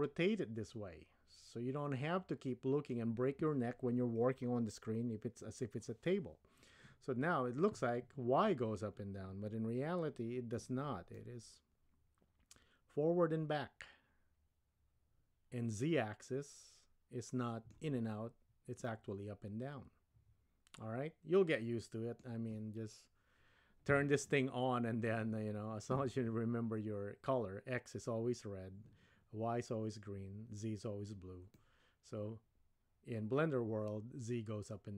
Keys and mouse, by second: 11.2-17.8 middle drag, 18.8-22.3 middle drag, 31.6-34.9 middle drag.